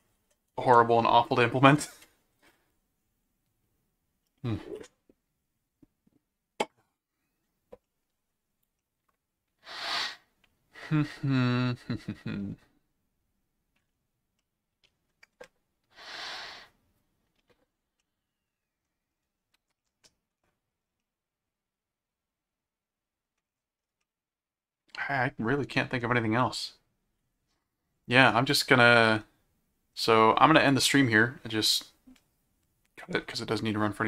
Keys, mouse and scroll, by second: 7.8 middle click, 8.8-13.8 middle drag, 14.4 middle click, 18.0 middle click, 19.8 middle click, 21.0-23.4 middle drag, 24.0 middle click, 28.5 click, 30.6 click.